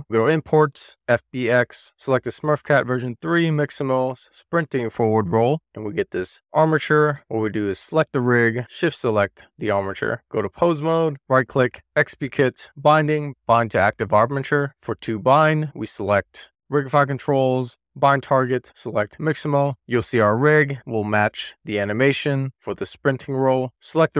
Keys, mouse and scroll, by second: 0.1-2.1 drag, 6.5-7.1 scroll down 4, 7.1 click, 8.9 shift+click, 10.2 click, 11.0 right click, 14.5 right click, 14.9 shift+middle click, 15.3 middle click, 17.0-17.6 drag, 17.8-19.7 drag, 22.7-23.9 drag.